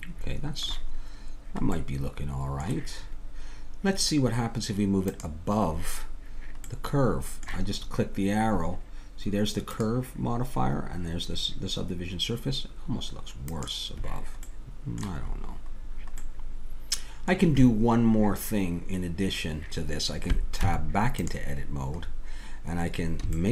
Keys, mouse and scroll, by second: 1.3-5.1 middle drag, 5.1-6.7 drag, 6.7 middle click, 9.7-15.3 drag, 20.6 Tab.